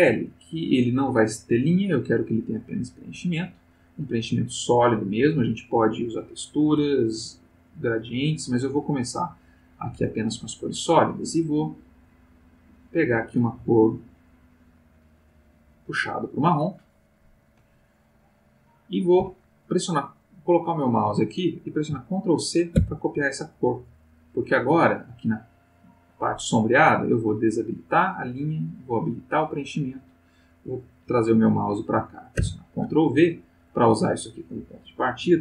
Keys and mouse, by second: 3.2 click, 5.1 click, 8.9 click, 11.1 click, 12.0-15.9 drag, 22.7 ctrl+c, 25.2 click, 27.3 click, 28.7 click, 32.4 ctrl+v, 34.4 click.